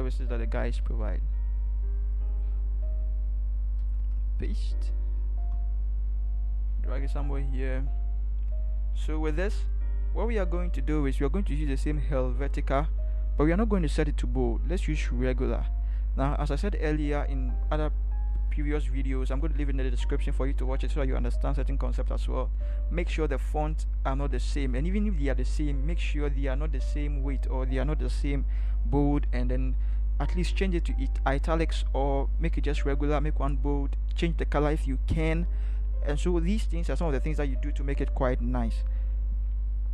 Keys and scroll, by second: 0.8 ctrl+v, 3.8 ctrl+v.